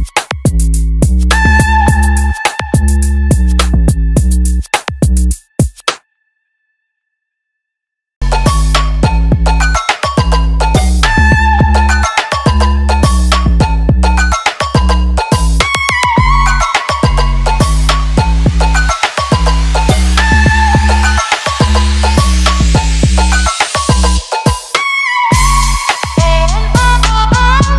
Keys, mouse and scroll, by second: 0.3 shift+click, 1.5 right click, 4.5-27.7 drag.